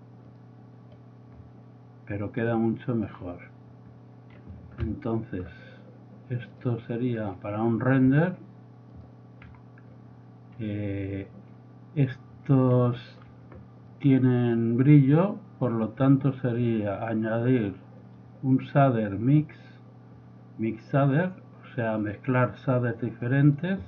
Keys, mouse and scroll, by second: 2.5-3.0 drag, 6.5 click, 7.6 click, 8.0 click, 9.3-9.8 drag, 10.5 click, 12.5 middle click, 12.6 middle click, 14.5 click, 15.5 click, 16.7-18.5 drag, 21.3 click, 23.3 click.